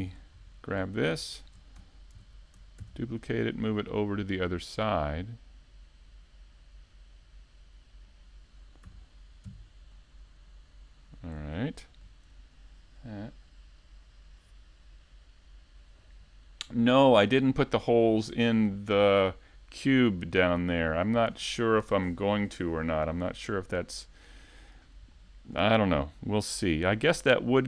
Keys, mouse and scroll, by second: 1.3-1.8 scroll down 2, 1.6 middle click, 2.3 shift+c, 3.4 shift+a, 6.0 click, 7.1 middle click, 8.1 KP_3, 8.4 KP_5, 10.0 click, 12.0 click, 14.1 KP_Decimal, 14.5 middle click, 15.1 z, 15.3-15.9 scroll down 2, 15.9-16.3 scroll down 2, 15.9 KP_5, 16.3 middle click, 17.3 scroll down 1, 20.0-20.7 scroll, 21.8 click, 22.9 scroll down 2, 23.1 middle click, 25.6 click, 25.9 middle click, 27.2 shift+middle click.